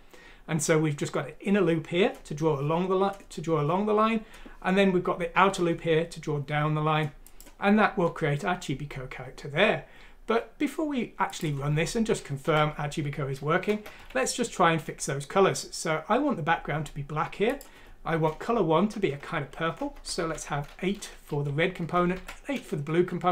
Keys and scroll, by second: 12.6 Left, 13.9 o, 19.7 BackSpace, 20.0 BackSpace, 20.2 8, 21.3 Right, 22.1 8, 23.0 Right, 23.0 Down, 23.0 BackSpace, 23.0 8.